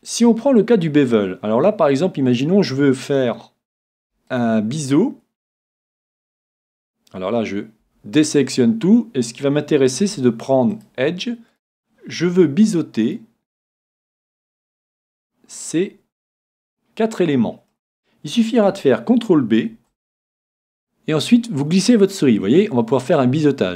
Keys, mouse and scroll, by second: 2.3-4.2 right drag, 4.3-6.2 right drag, 7.8 a, 10.0 c, 11.5-16.5 right drag, 15.5-17.4 middle drag, 19.7 c.